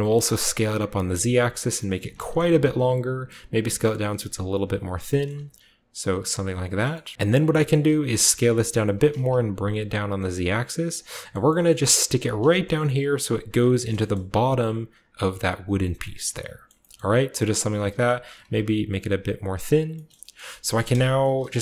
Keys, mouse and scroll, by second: 0.9 click, 1.2-2.7 scroll down 2, 1.8 s, 2.0 z, 2.7 click, 3.2 s, 4.8-7.1 shift+drag, 4.9-5.3 typing, 5.0-6.6 shift+middle drag, 5.2-6.6 shift+scroll up 1, 6.8 shift+middle click, 7.1 shift+right click, 7.6-10.8 scroll up 1, 7.6 middle click, 7.9-9.0 typing, 8.6 click, 9.0-10.9 shift+drag, 11.2-12.5 shift+middle drag, 11.4-12.5 shift+scroll up 1, 12.1 typing, 13.4 click, 13.6 click, 13.6 typing, 14.0 shift+click, 15.1 typing, 15.5-17.6 drag, 15.8 scroll down 1, 16.6-18.1 shift+middle drag, 17.6-18.3 typing, 18.0 shift+click, 19.5 click.